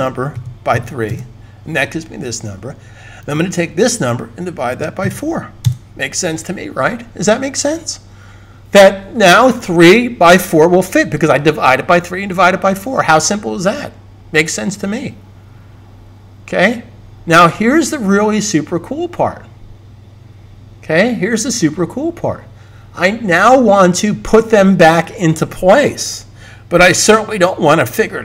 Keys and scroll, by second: 0.2 /, 0.6 3, 4.6 /, 4.9 4.